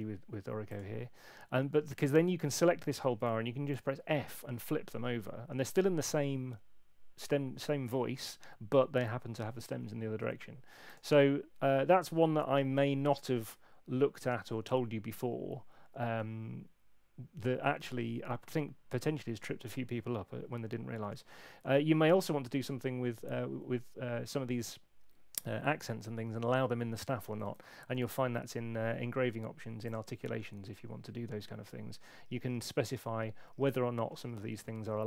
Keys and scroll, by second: 3.7 f, 27.5 shift+super+e.